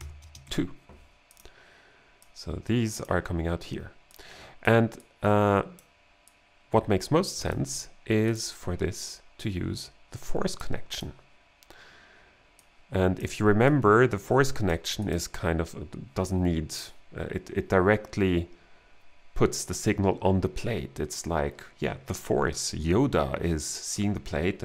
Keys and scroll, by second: 0.0-0.4 typing.